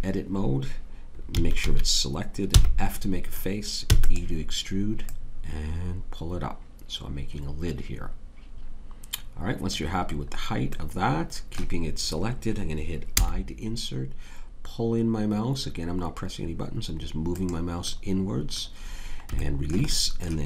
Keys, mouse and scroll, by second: 1.3 a, 1.6 a, 2.5 f, 3.8 e, 11.4-12.5 middle drag, 13.1 i.